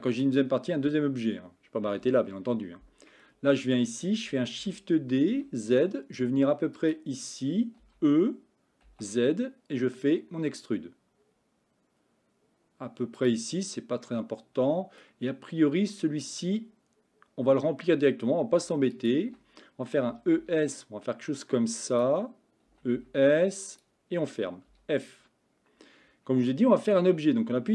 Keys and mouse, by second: 2.1 KP_1, 3.3 shift+middle click, 4.6 shift+d, 7.9 e, 14.1 middle click, 19.0 alt+click, 20.2 e, 22.8 e, 24.8 f.